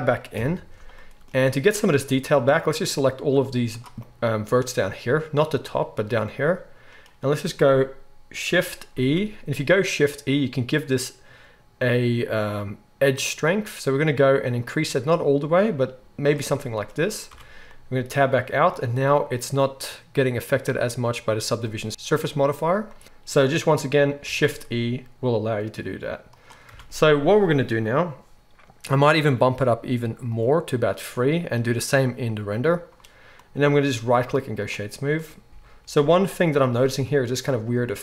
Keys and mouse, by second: 0.3 KP_1, 1.3 z, 3.4 z, 8.9 shift+e, 16.3-23.0 middle drag, 17.2 Tab, 21.6 Tab, 23.0-26.4 drag, 24.2 shift+e, 26.4-30.3 middle drag, 26.7 Tab, 30.3-35.5 drag, 34.2-35.5 middle drag, 34.2-35.5 right drag, 35.5 Tab.